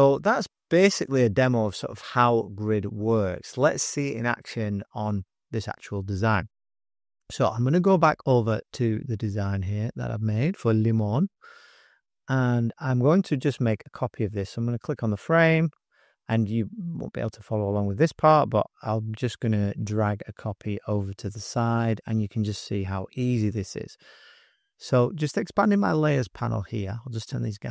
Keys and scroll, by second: 10.0 super+=, 11.1 super+-, 11.3 super+-, 12.1 §, 12.6 space, 13.1 space, 13.2 space, 24.5-26.8 typing.